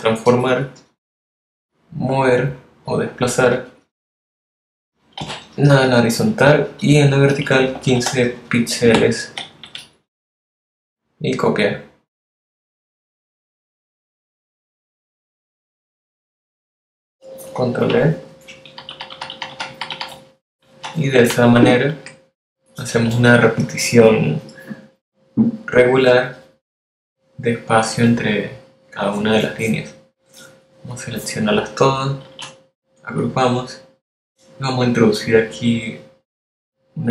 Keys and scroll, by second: 6.4 0, 8.3 5, 16.7 super+Tab, 18.7 super+d, 33.2 super+g.